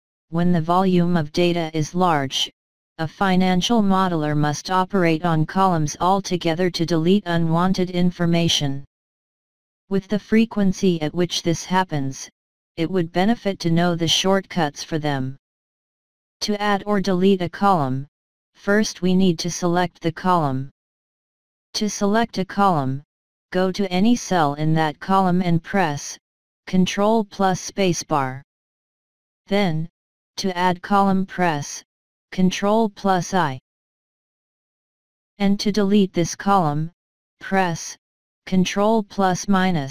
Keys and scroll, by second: 27.5 space, 33.9 ctrl+i.